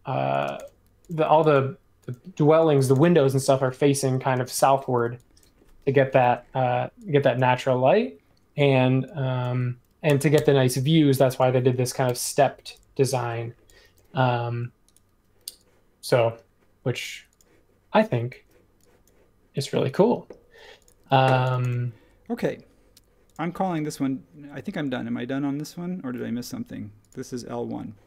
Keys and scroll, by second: 0.4 space, 1.2 e, 2.8 space, 4.4 space, 4.9 p, 6.2 super+z, 10.0 1, 10.3 Return, 12.0 n.